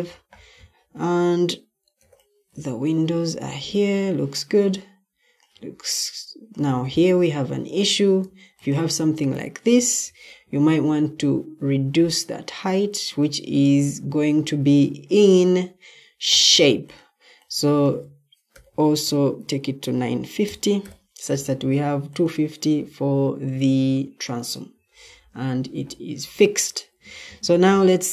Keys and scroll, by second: 1.9 o, 7.4 Escape, 7.6 typing, 10.0 ctrl+t, 18.4-20.7 typing, 24.6 Escape, 25.6-26.3 typing.